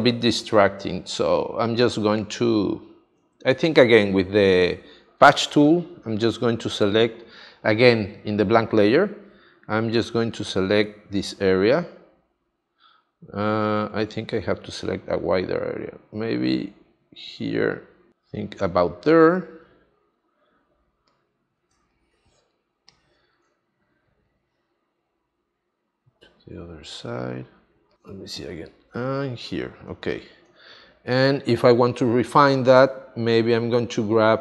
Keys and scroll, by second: 1.7 space, 21.7 space, 29.8 space.